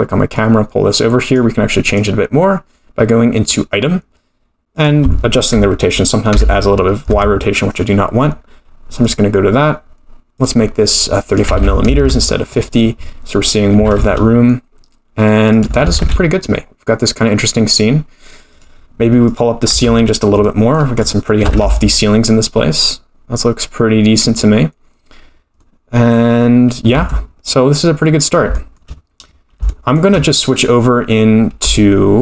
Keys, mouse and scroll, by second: 0.3 click, 1.8 click, 4.7 click, 9.0 click, 10.3 click, 13.8 g, 15.8 g, 19.2 click, 19.7 Tab, 20.4 middle click, 20.9 click, 21.4 g, 25.6 middle click, 26.9 Tab, 28.0-28.5 scroll down 2, 28.5-29.6 shift+scroll up 3, 28.6 shift+middle click, 29.7 shift+middle click, 31.8 shift+middle click.